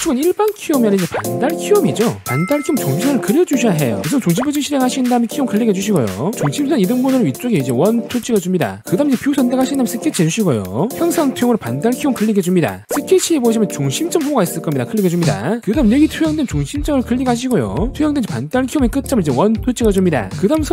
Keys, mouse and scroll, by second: 4.3 right click, 5.4 click, 6.2 click, 7.2 click, 7.9 click, 8.6 click, 10.2 click, 10.9 s, 11.2 scroll up 2, 11.5-11.8 scroll down 2, 12.3 click, 17.9 click, 19.3 click, 20.4 click.